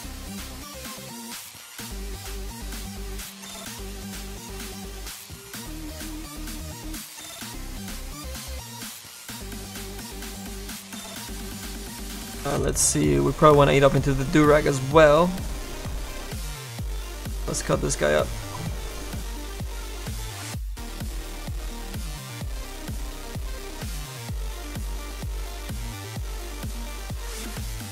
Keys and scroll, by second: 25.9 s.